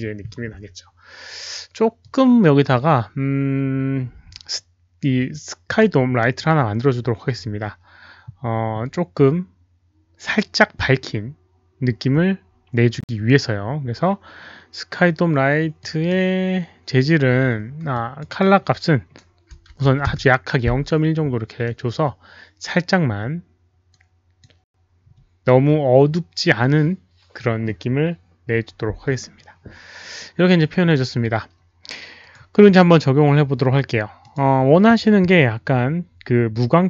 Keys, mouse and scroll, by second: 2.0 click, 4.5 click, 11.5 click, 12.9 click, 15.8 drag, 17.9 click, 18.2 click, 19.8 click, 19.8 KP_1, 19.8 KP_Decimal, 20.0 Return, 21.7 Return, 21.7 KP_1, 21.7 KP_Decimal, 24.0 click, 26.7 click, 26.7 KP_Decimal, 27.3 click, 29.3 Return, 29.3 click, 30.3 KP_1, 32.1 click, 34.2 click.